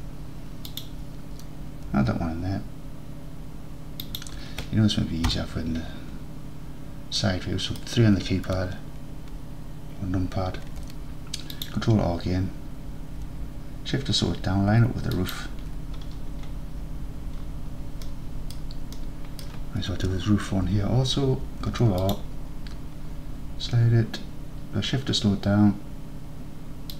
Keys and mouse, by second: 4.1 shift+click, 5.3 KP_3, 7.3 middle click, 10.7 ctrl+r, 15.2 shift+click, 17.5-18.6 middle drag, 19.0 middle click, 21.5 ctrl+r.